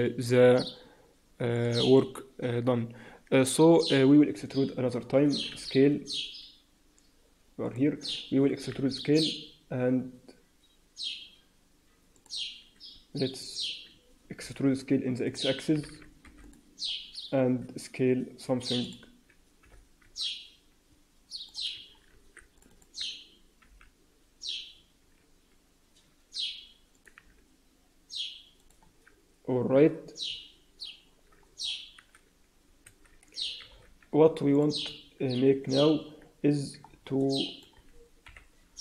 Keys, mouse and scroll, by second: 7.6 click, 8.4 e, 17.0-17.4 scroll down 3, 17.0 s, 17.4 s, 19.5 g, 22.0 ctrl+r, 23.6 g, 27.1 s, 28.8 Tab, 29.2-30.2 scroll up 3, 29.6 Tab, 30.2 scroll up 1, 31.4-32.3 scroll down 2, 32.3 a, 33.0 alt+a, 33.2-33.6 scroll down 4, 33.6 z, 34.7-35.6 scroll down 3, 34.8 Tab, 35.6-36.0 scroll up 2, 36.0 Tab, 36.4 Tab, 36.8-37.1 scroll down 2, 37.1 alt+middle click, 38.2 KP_3.